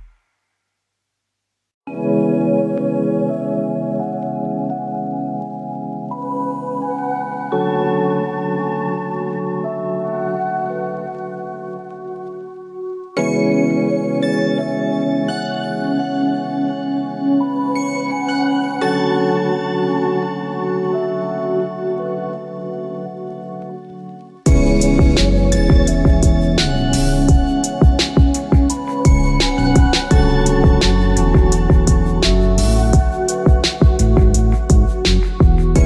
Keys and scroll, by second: 0.3 Return, 32.7 ctrl+alt+shift+e.